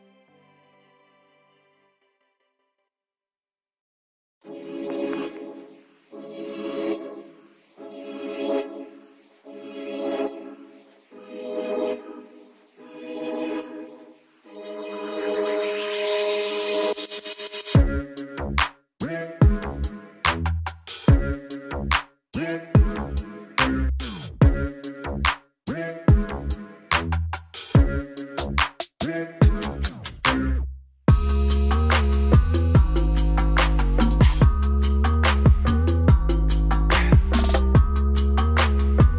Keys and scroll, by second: 4.5 alt+space, 5.2 ], 5.2 ], 5.3 ], 5.4 ], 10.1 alt+space, 19.4 alt+space, 25.9 ctrl+alt+shift+e, 28.3-30.2 typing, 31.5 n, 31.9 s, 31.9 BackSpace, 32.0 d, 35.0 ctrl+shift+a.